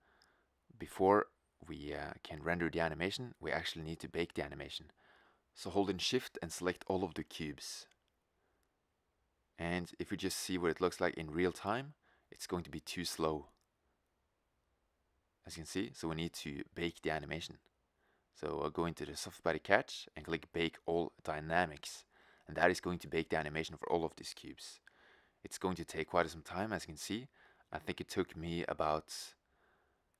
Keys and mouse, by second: 3.6 click, 7.0-8.7 drag, 8.7-11.1 right drag, 11.5 middle click, 11.7 click, 13.5 click, 14.1 middle drag, 14.3 middle drag, 14.7 middle click, 17.7-21.9 drag, 22.4-30.1 drag.